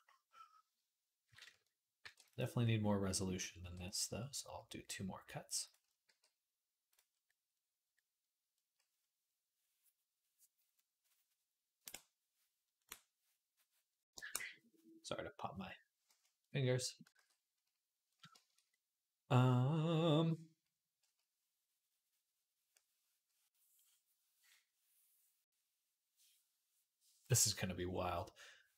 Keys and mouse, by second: 1.8 ctrl+r, 3.4 ctrl+r, 5.9 g, 17.4 ctrl+s.